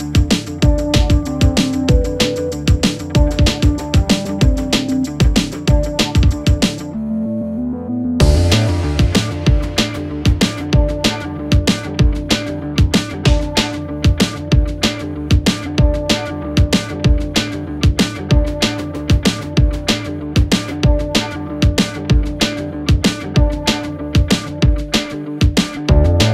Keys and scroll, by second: 11.2 shift+Page_Up, 15.0 Escape.